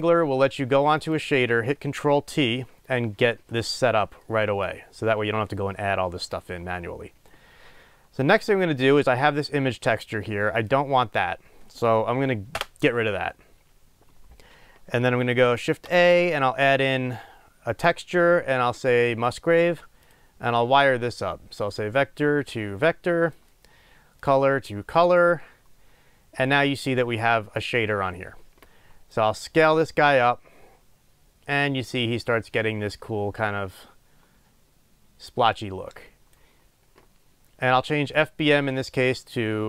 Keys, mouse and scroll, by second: 0.1 click, 10.5 click, 12.7 Delete, 23.3-39.6 drag.